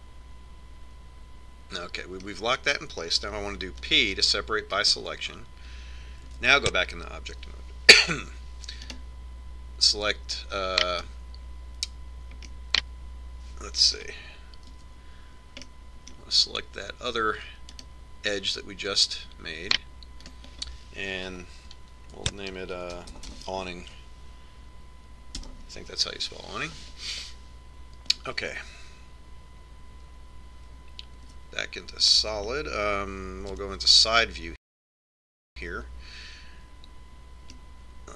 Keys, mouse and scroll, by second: 1.4 middle click, 5.7 p, 8.1 Tab, 10.8-12.6 right drag, 12.8-14.6 right drag, 14.3-16.1 middle drag, 16.6 z, 17.6-19.6 middle drag, 19.6-21.4 right drag, 22.1-24.0 drag, 33.3 z, 35.6 KP_3.